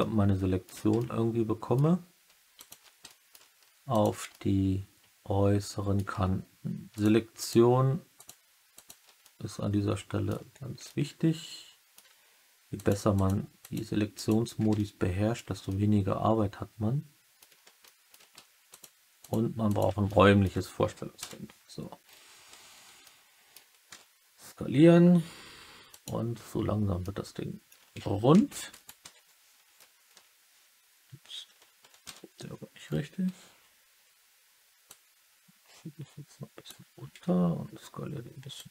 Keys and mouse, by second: 0.9 alt+middle click, 2.5 shift+click, 3.0 alt+middle click, 4.2-5.9 alt+middle drag, 7.3 shift+click, 8.1 shift+click, 8.7 shift+click, 9.1 alt+middle click, 9.5 alt+click, 10.8 alt+click, 10.8-11.9 alt+middle drag, 12.7 shift+click, 13.2 shift+click, 13.6 shift+click, 14.7 alt+middle click, 15.6-17.3 alt+middle drag, 17.8 alt+middle click, 18.6 shift+click, 20.0 alt+middle click, 21.1 KP_3, 22.9 middle click, 23.8 s, 25.8 click, 26.8 click, 26.9 alt+middle click, 27.8-30.0 typing, 28.6 right click, 32.0 KP_3, 34.8-36.6 drag, 37.0 s, 38.5 click.